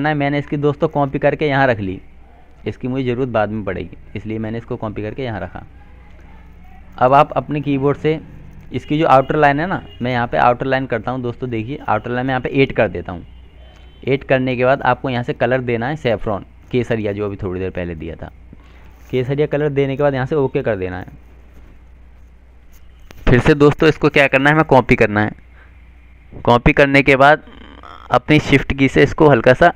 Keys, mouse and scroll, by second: 0.3 click, 3.0 right click, 4.0 click, 7.6 F12, 8.9 click, 22.2 click, 26.8 shift+click.